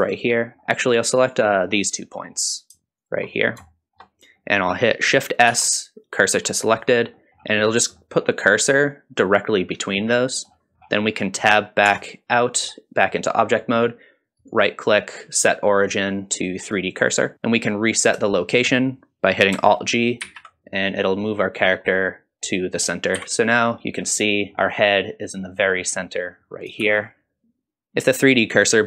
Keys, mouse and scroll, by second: 1.3 click, 1.8 middle click, 3.0 shift+click, 3.4 scroll up 2, 3.7 shift+middle click, 4.4 middle click, 5.5 shift+s, 7.2 middle click, 8.0 middle click, 10.2 middle click, 10.8-11.5 scroll down 3, 11.9 Tab, 12.5 middle click, 13.1-13.8 middle drag, 14.4-17.3 right drag, 17.3 middle click, 17.3-18.2 scroll down 4, 18.3 shift+middle drag, 20.2 alt+g, 20.8 scroll up 2, 21.2-22.4 middle drag, 23.2 KP_1, 23.7 scroll up 1, 24.0 scroll down 2, 24.3 shift+middle drag, 24.5-25.0 scroll up 3, 26.8 shift+z, 27.9 middle click.